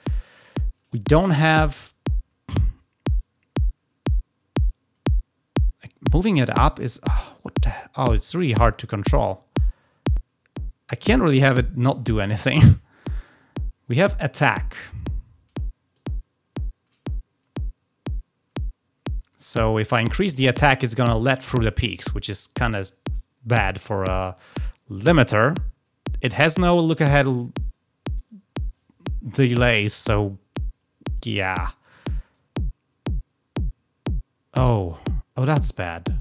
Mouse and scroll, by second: 1.6-9.3 shift+drag, 10.0-12.1 drag, 15.9-20.2 shift+drag, 31.1-31.6 drag, 31.8-35.8 drag.